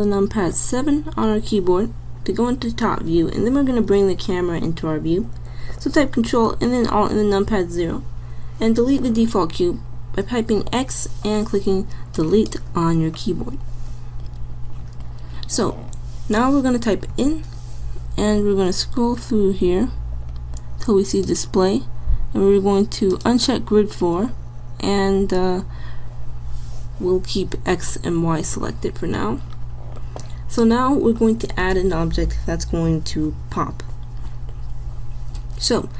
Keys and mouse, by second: 0.6 KP_7, 7.1 ctrl+alt+KP_0, 10.3 x, 17.2 n, 20.3-23.1 drag, 26.8-30.2 drag.